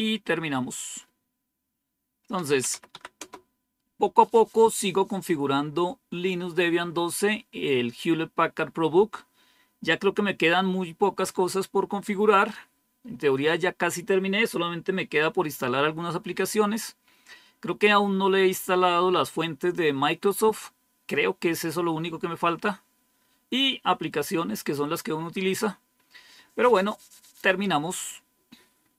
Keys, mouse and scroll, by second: 2.0-3.1 typing.